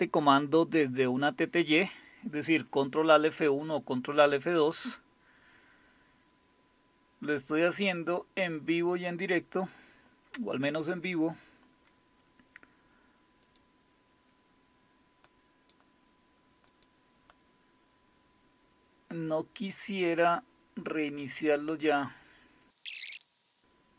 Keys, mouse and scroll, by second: 13.4 click, 15.3 click, 16.7 click, 19.6 click, 21.9 click, 23.6-23.9 scroll down 1.